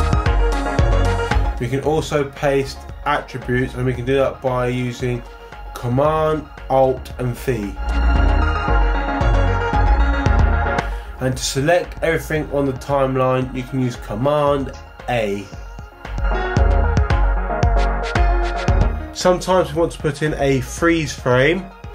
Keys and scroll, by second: 1.6 super+c, 7.5 alt+super+v, 15.0 super+a.